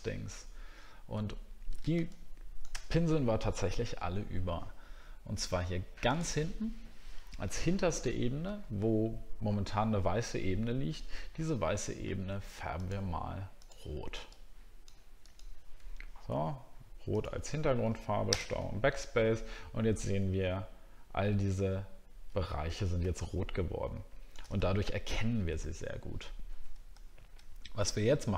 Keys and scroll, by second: 0.4-0.8 alt+scroll down 2, 1.4-2.1 alt+scroll down 1, 18.3 ctrl+BackSpace, 20.2-20.7 alt+scroll up 1, 24.6 alt+scroll up 2, 27.0 alt+scroll up 1.